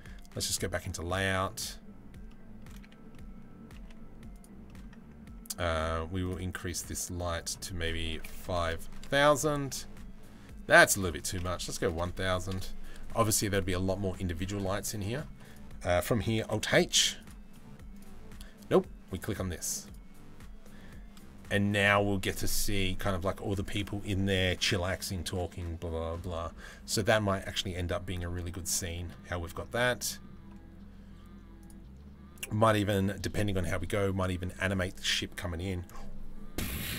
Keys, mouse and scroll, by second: 1.9 middle click, 2.7 middle click, 4.3 middle click, 4.3 g, 5.8 click, 7.0-8.7 middle drag, 8.0 KP_0, 8.2 KP_0, 9.3 middle click, 10.5-12.2 middle drag, 11.5 KP_0, 11.7 KP_0, 13.7 middle click, 14.6 middle click, 15.1 click, 16.1 alt+h, 16.8 click, 17.1 middle click, 17.5 click, 18.8 click, 19.4 click, 29.7 middle click, 31.2 click.